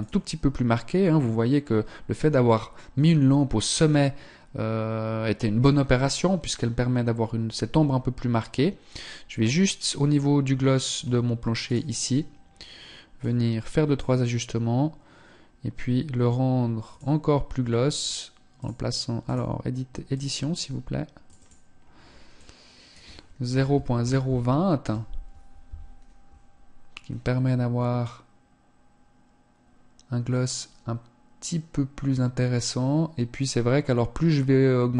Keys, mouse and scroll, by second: 9.7 click, 11.0 right click, 12.2 click.